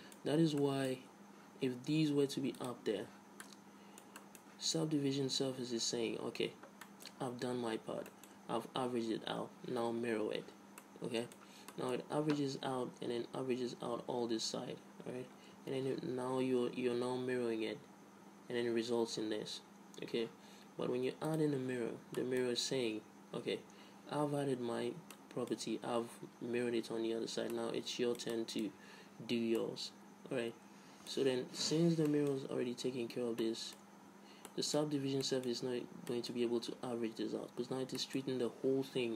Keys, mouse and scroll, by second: 3.0 click, 3.8 middle click, 6.2 middle click, 6.4 Tab, 6.8 Tab, 7.2-13.8 middle drag, 8.7 Tab, 9.3 Tab, 12.4 Tab, 15.9 Tab, 21.6-23.5 drag, 22.9 Tab, 23.5 Tab, 23.5 middle click, 25.5-27.2 middle drag, 27.9 middle click, 28.3-31.6 middle drag, 31.6 Tab, 32.1 Tab, 34.4 Tab, 35.0 middle click, 35.2 Tab, 35.6 middle click, 36.1 Tab, 38.0 Tab.